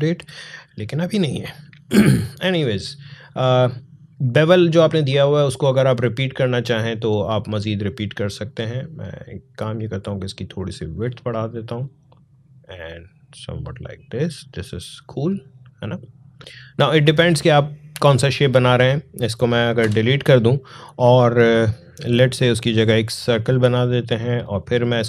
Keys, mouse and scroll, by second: 5.5-16.4 drag, 16.4 ctrl+z, 19.6 Delete, 23.2-24.8 drag.